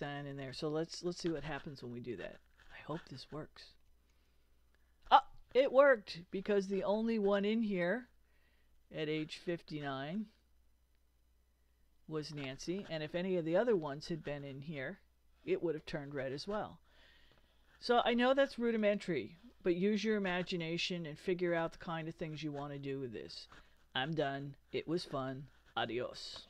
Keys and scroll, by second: 3.9 super+Return.